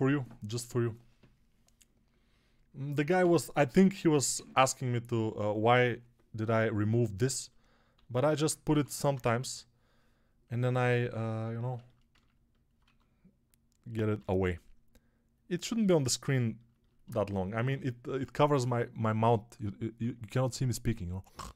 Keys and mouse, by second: 7.8 alt+q, 8.6 g, 9.0 ], 9.1 ], 9.3 ], 12.7 1, 14.0 g.